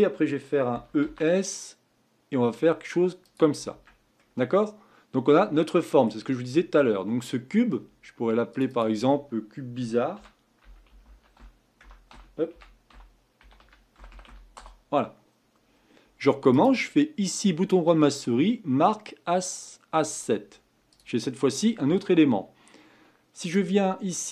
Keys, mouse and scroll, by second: 0.7 e, 3.7 Tab, 4.2-7.2 middle drag, 8.5 click, 8.7-11.8 drag, 14.1 r, 16.5-19.7 right drag, 20.9 click, 23.4-24.3 drag.